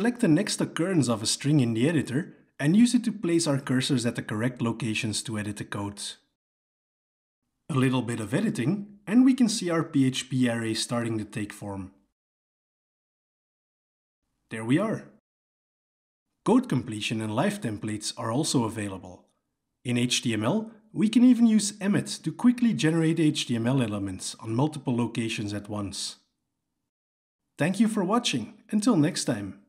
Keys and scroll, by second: 0.1 alt+j, 0.3 Delete, 7.6 Escape, 19.5 alt+j, 19.6 alt+j, 23.2 Tab.